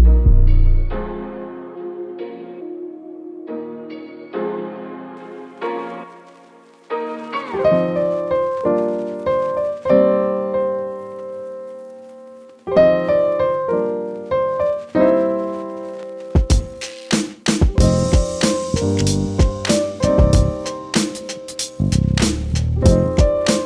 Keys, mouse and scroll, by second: 21.6 ctrl+r.